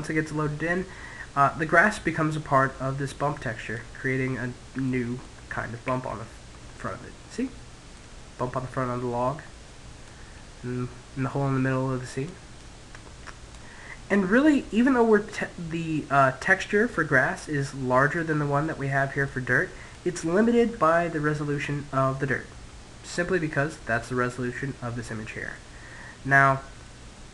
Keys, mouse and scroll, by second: 0.3-1.9 middle drag, 3.3 middle click, 4.5 middle click, 5.4 ctrl+z, 5.8 middle click, 8.7-11.3 middle drag, 11.7 click, 13.4-15.2 middle drag, 16.3-20.8 middle drag, 24.9-27.3 middle drag.